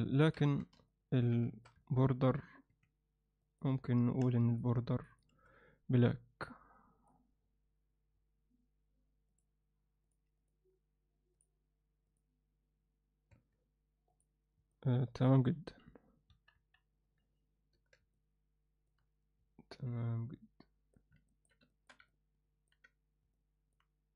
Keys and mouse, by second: 0.4 Tab, 0.9 ctrl+alt+middle click, 1.4 alt+shift+middle click, 1.8 ctrl+alt+middle click, 2.7 3, 3.4 click, 3.7 click, 4.5 shift+click, 5.1 shift+click, 6.8 click, 10.1 click, 10.4-11.4 drag, 12.1 click, 13.3 Tab, 14.1 click, 14.7-15.2 alt+middle drag, 16.5 KP_1, 17.7 Tab, 18.1 alt+middle click, 19.8-20.9 alt+middle drag, 21.3 ctrl+alt+middle click, 21.7 alt+shift+middle click, 22.1 ctrl+alt+middle click, 23.3 alt+middle click.